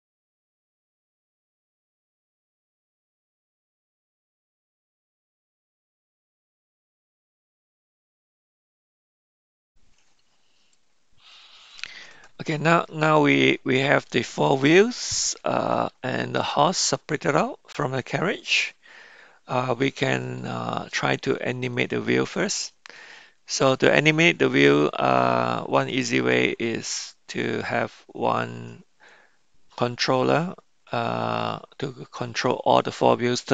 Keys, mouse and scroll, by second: 1.1-2.6 drag, 2.7 click, 3.0-4.1 drag, 4.4 click, 5.8-6.8 drag, 7.0 click, 7.2 click, 7.6 middle click, 8.6 Tab, 8.6 click, 8.8 middle click, 9.0 middle click, 9.2 middle click, 10.7-12.0 middle drag, 12.2-13.0 shift+middle drag, 13.2-14.1 middle drag, 14.9-15.9 middle drag, 18.0-20.4 middle drag, 21.7-23.0 middle drag, 26.0-27.8 middle drag.